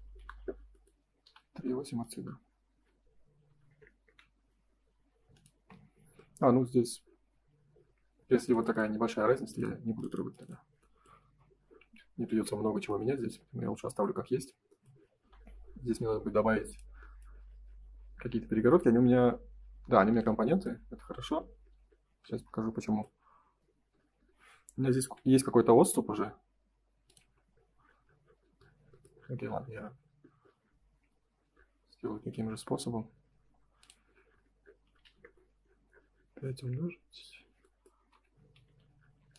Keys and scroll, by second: 0.1 Delete, 4.0 Return, 5.5 space, 9.1 Escape, 11.2 Delete, 21.0 F3, 24.9 ctrl+s, 25.8 m, 35.2 Return, 37.9 space, 38.5 F4.